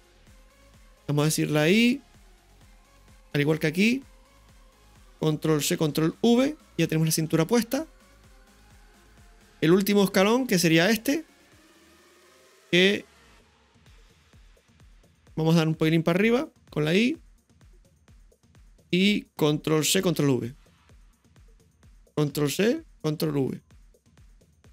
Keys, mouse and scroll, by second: 1.5 i, 3.1 click, 5.6 ctrl+c, 6.1 ctrl+v, 8.5 space, 10.0-14.9 drag, 16.7 i, 18.0 click, 20.0 ctrl+c, 20.2 ctrl+v, 21.4 right click, 22.4 ctrl+c, 23.1 ctrl+v, 24.3 click.